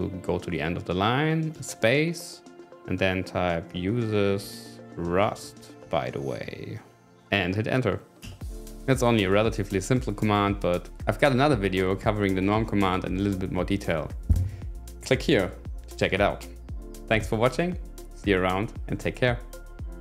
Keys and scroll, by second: 1.5 space, 3.4-5.1 typing, 8.3 Return.